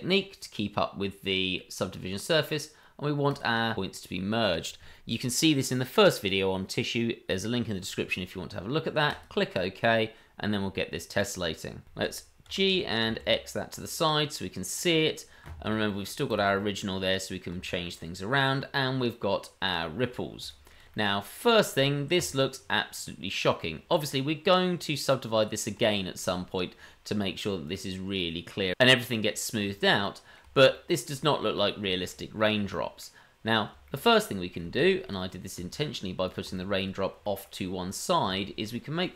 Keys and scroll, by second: 12.4 g.